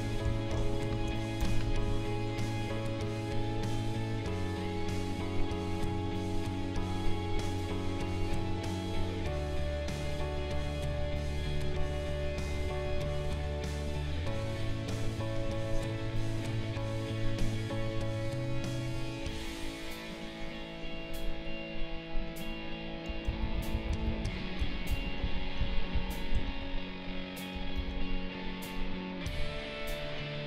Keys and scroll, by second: 0.9 ctrl+shift+a, 1.4 b, 23.3 ctrl+z, 27.7 ctrl+z.